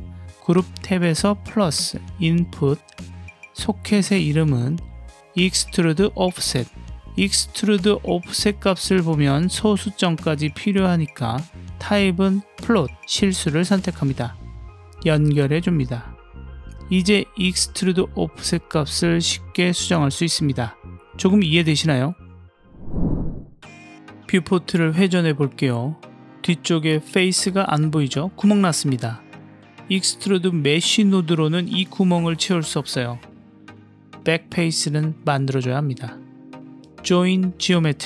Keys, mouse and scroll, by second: 1.0 click, 2.5-3.2 drag, 4.1 click, 4.2-6.4 drag, 6.3 f, 15.3 click, 16.2 click, 17.9 middle click, 19.1-21.2 drag, 22.2 click, 25.0-26.4 middle drag, 28.1 click, 28.9 click, 29.5 click, 29.8-30.2 middle drag, 30.8 middle click, 31.1-32.5 scroll down 1, 32.6 click, 33.4 g, 35.0 click, 35.2 g, 35.8 click, 36.4 shift+a.